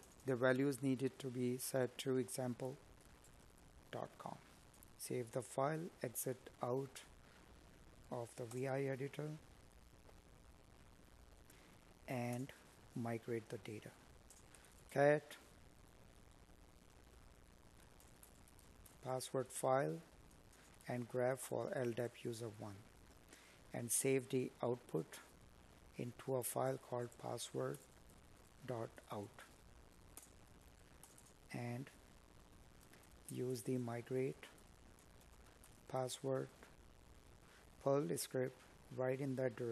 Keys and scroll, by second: 5.3 space, 11.5 space, 26.3 Tab, 31.8 Tab.